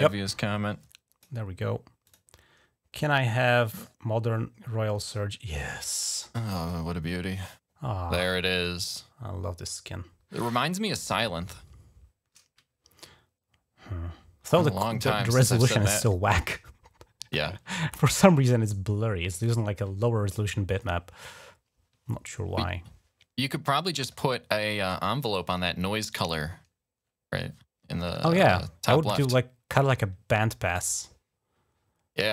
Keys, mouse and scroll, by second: 1.9 click, 4.8 click, 6.0 click, 6.9-10.3 drag, 27.9-32.3 drag.